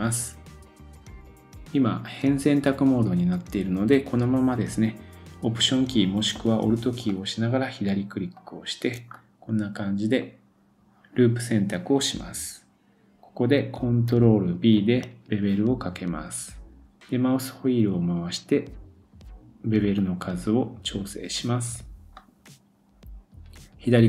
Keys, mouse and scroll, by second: 7.0-8.9 alt+drag, 8.9-11.4 middle drag, 9.1-9.5 scroll up 1, 14.8 ctrl+b, 22.2 click.